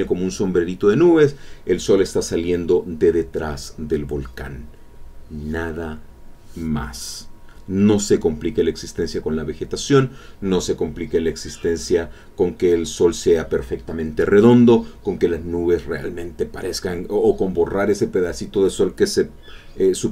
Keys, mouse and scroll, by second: 1.8 middle click, 5.0-6.9 middle drag, 8.5 click, 9.6 click, 10.6-12.1 drag, 12.5-13.6 drag, 17.2-18.1 scroll up 2.